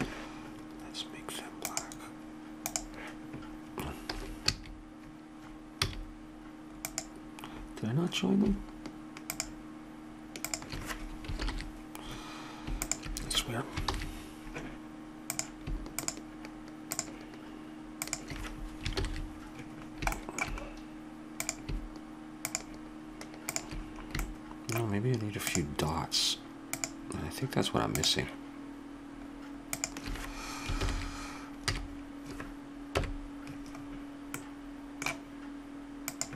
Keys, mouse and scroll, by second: 1.7-3.6 drag, 4.2 a, 4.5 a, 5.8 a, 6.9 click, 9.3-11.4 drag, 11.4 ctrl+j, 13.9 ctrl+j, 15.3-19.9 drag, 18.9 ctrl+j, 21.4 click, 23.9-25.2 drag, 25.5-26.6 drag, 26.7-29.6 drag, 29.7-31.5 drag, 30.8 ctrl+j, 31.8 a.